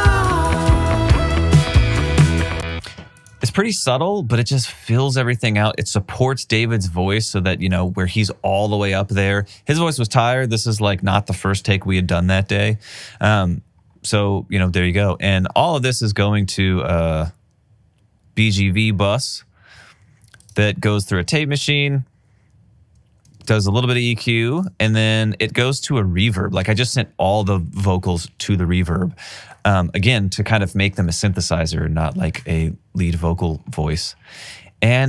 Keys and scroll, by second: 2.7 space, 21.6 alt+super+w, 23.7 alt+super+w, 26.7 alt+super+w, 32.9 r.